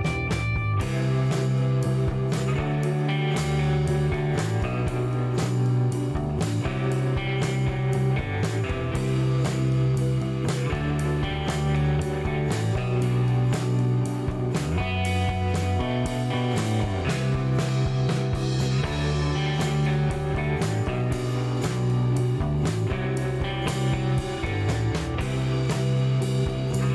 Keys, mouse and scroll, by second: 0.1 shift+middle click, 1.8 click, 3.6 click, 3.9 space, 4.2 scroll down 1, 5.2 click, 6.8 click, 7.2 space, 9.2 scroll down 1, 10.1 shift+right click, 13.8 middle click, 14.5 shift+right click, 15.7 shift+right click, 16.5 shift+scroll up 1, 17.3 shift+right click, 18.2 shift+middle click, 18.9-19.4 scroll up 3, 19.9 click, 20.8 scroll down 1, 21.2 middle click, 22.4 scroll up 1, 23.8 middle click, 26.2 click.